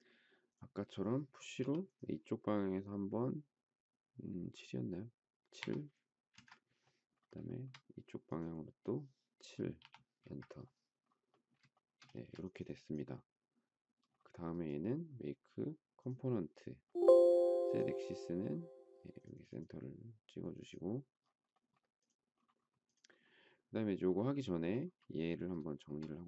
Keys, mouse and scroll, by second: 1.6 p, 5.6 7, 6.3 Return, 7.6 shift+middle click, 9.8 7, 10.1 Return, 11.7 shift+middle click, 11.8 shift+double middle click, 12.1 space, 25.7 shift+middle click.